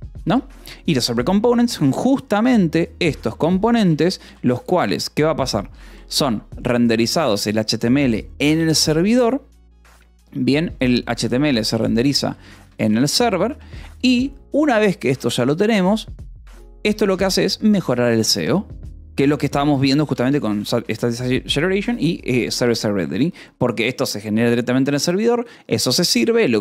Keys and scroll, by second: 0.2 Escape, 3.2-5.8 typing, 7.1-8.2 typing, 10.6 :, 11.6 BackSpace, 12.6 space, 12.8 s, 13.4 Escape, 16.8 a, 17.3 space, 18.0 BackSpace, 19.1-20.4 typing, 20.6 Escape, 22.7-24.2 typing, 24.7 Escape.